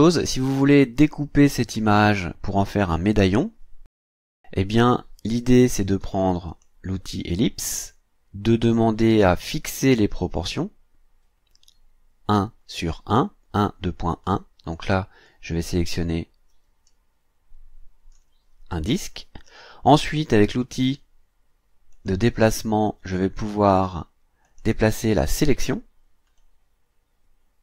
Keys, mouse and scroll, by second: 6.5 click, 15.3-18.3 drag, 21.9 click, 24.4 click, 26.4-27.6 drag.